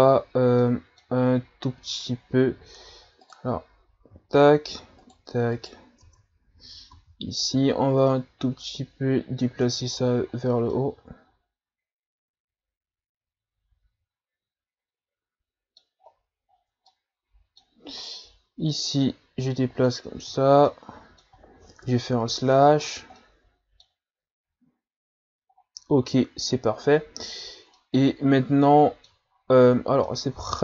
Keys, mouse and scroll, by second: 0.6-3.2 middle drag, 3.2 right click, 5.0 shift+right click, 5.6 right click, 6.0 Tab, 6.6 a, 6.9 a, 8.1-9.7 drag, 9.7 Tab, 10.0 a, 10.4-10.7 scroll down 2, 10.7-16.0 middle drag, 16.0-16.5 scroll up 3, 16.5-16.9 scroll down 4, 16.9-18.0 middle drag, 18.0 right click, 19.0-20.2 drag, 20.2 a, 20.4 scroll down 3, 20.7-21.8 middle drag, 21.8 KP_Divide, 22.8-23.2 scroll down 5, 23.2-24.3 middle drag, 24.3-24.7 scroll down 4, 24.7-25.5 scroll up 5, 25.5-26.0 scroll up 5, 27.3-27.8 scroll down 1, 27.8-29.3 middle drag, 29.3-29.7 scroll down 3, 29.7 scroll up 2, 30.0-30.6 middle drag.